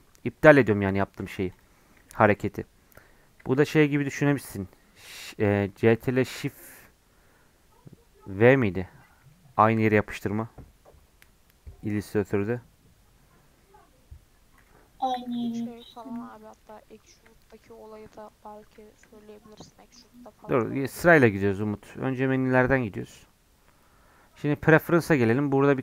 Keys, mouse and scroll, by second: 1.5 click, 2.1-8.8 shift+middle drag, 8.8 scroll down 2, 9.1-15.1 middle drag, 15.1 x, 15.8 click, 16.2 g, 16.9 middle click, 17.2 scroll up 1, 17.4-20.0 shift+middle drag, 20.0-25.8 drag.